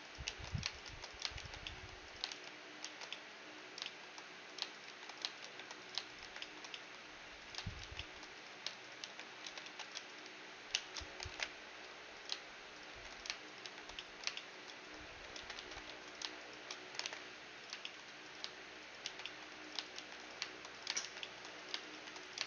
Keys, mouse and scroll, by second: 0.3-2.9 typing, 1.7-5.6 drag, 4.9 shift+r, 5.4 shift+r, 5.6 middle click, 6.2 shift+r, 6.4-9.9 middle drag, 7.9 shift+r, 9.1 shift+r, 9.5 ctrl+z, 9.7 ctrl+z, 10.3 shift+r, 10.7 shift+r, 11.4 alt+m, 12.9 shift+r, 13.7 shift+r, 14.0 middle click, 15.4 ctrl+z, 15.6 ctrl+z, 15.9 a, 17.1 alt+m, 17.9-19.4 drag, 19.1 shift+r, 20.0 shift+r, 21.1 shift+r, 22.0 shift+r.